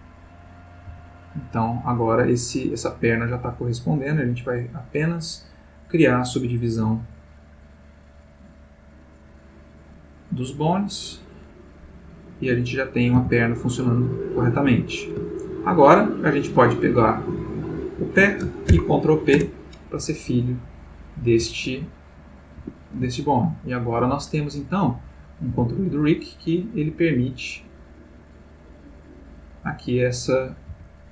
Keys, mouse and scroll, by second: 0.2 click, 0.9 g, 3.3 Escape, 4.1 click, 6.0 click, 7.0 click, 9.3 click, 10.9 click, 12.3 click, 13.1 g, 14.6 Escape, 15.3-15.9 ctrl+middle drag, 16.3 click, 17.6 shift+click, 18.8 ctrl+p, 19.3 ctrl+Return, 20.7 click, 21.4 g, 22.6 Escape, 23.4-24.0 ctrl+middle drag, 24.9 click, 25.5 g, 29.1 click, 29.9 click, 30.7 g.